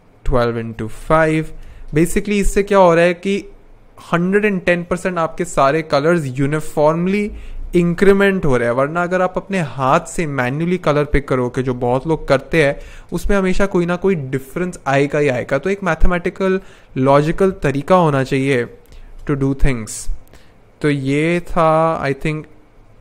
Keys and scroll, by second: 0.2-2.0 typing, 6.6-8.2 typing, 11.2 1, 11.4 2, 12.2 shift+8, 12.5 7, 12.8 Return, 16.5-18.9 typing, 19.2 Return, 22.7-23.0 typing.